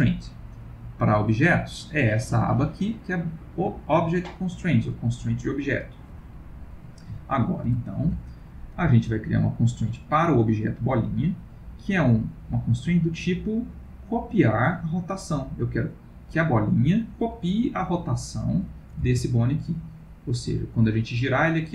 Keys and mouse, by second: 0.8 click, 5.8 click, 6.5 middle click, 6.7 middle click, 7.1 middle click, 7.2 ctrl+middle click, 7.8 shift+middle click, 8.1 shift+middle click, 9.4 click, 18.4 click, 19.1 r.